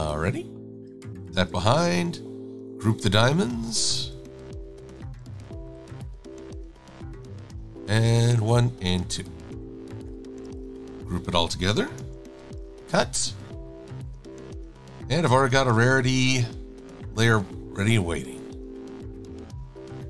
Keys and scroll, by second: 2.1 v, 5.0 v, 12.0 super+g, 12.5 super+x, 17.2 super+v, 18.3 e.